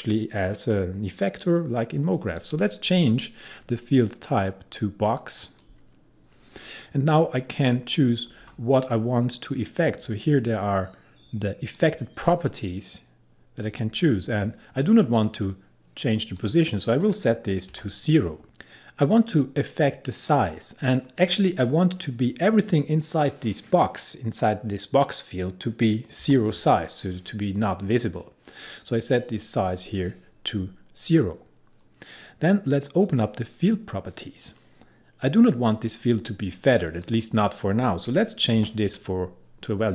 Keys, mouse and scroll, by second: 2.4 click, 5.5 click, 8.3-10.1 scroll down 1, 11.8 click, 13.7-15.5 scroll down 1, 16.4 click, 17.8 0, 20.2 click, 26.3 0, 33.1 click, 37.1 click, 38.6 0.